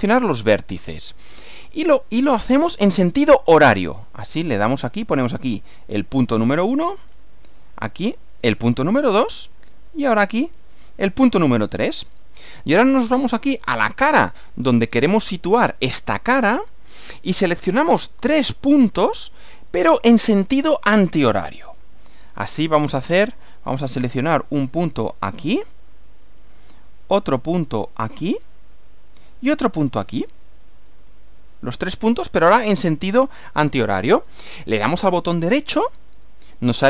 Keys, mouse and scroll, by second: 5.5 click, 8.0 click, 10.9 click, 13.2-15.0 middle drag, 17.5 middle click, 18.7-20.0 middle drag, 26.0 click, 28.8 click, 30.9 click, 35.9 right click.